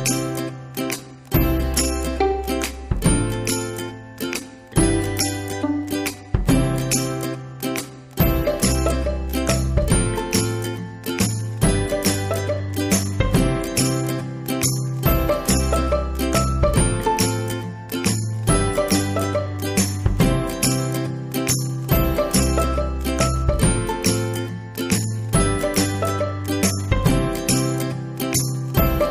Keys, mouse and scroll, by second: 1.4 click, 2.4 middle click, 3.2-8.0 drag, 8.7-12.2 ctrl+drag, 12.6 middle click, 13.6-23.7 drag, 24.2-26.2 middle drag, 26.2-29.1 drag.